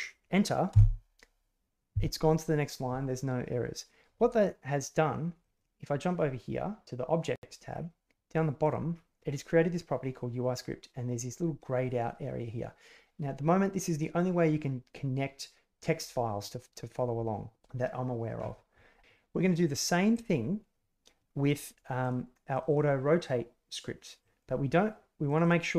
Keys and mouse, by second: 0.7 Return, 8.5 click.